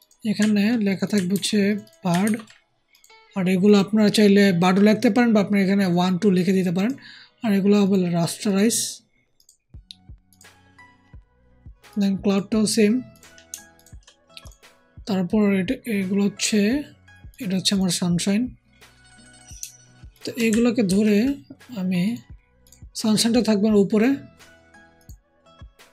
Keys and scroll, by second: 1.2 ctrl+c, 2.1 ctrl+v, 20.8 ctrl+shift+g.